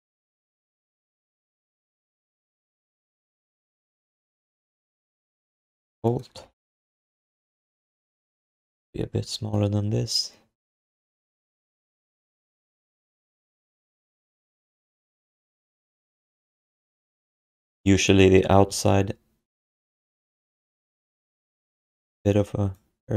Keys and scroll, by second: 1.3 1, 2.1 q, 3.5 w, 6.3 q, 8.7 r, 13.1 q.